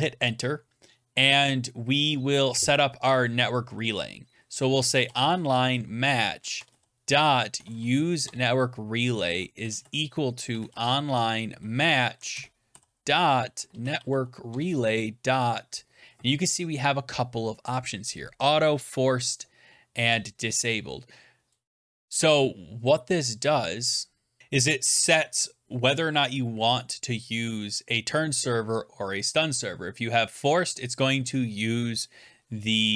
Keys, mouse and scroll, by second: 4.5-8.1 typing, 8.1 Tab, 9.2-11.2 typing, 11.9 Down, 12.2 Return, 12.3-14.9 typing.